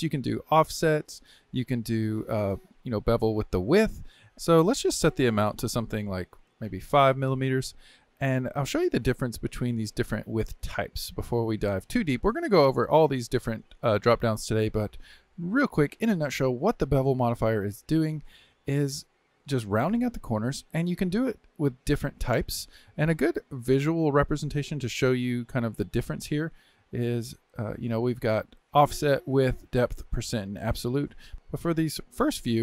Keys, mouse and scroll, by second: 0.8-3.9 drag, 4.3 ctrl+z, 5.2-8.2 drag, 10.1-11.6 drag, 15.4-20.9 middle drag, 20.9-23.9 drag, 28.0-31.2 drag.